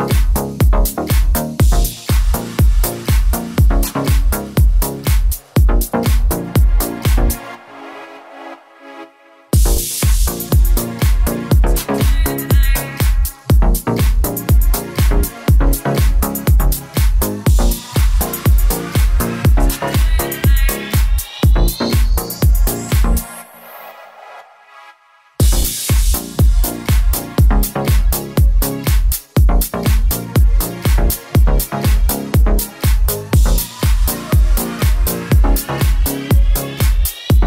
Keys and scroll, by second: 0.3 super+z, 1.0 super+z, 9.4 Return, 12.1-12.9 typing, 24.0 0, 24.2 Return, 24.7 Up, 25.1 Down, 25.8 Up, 25.9 Down, 26.4 Up, 36.9 0, 37.2 BackSpace, 37.4 0.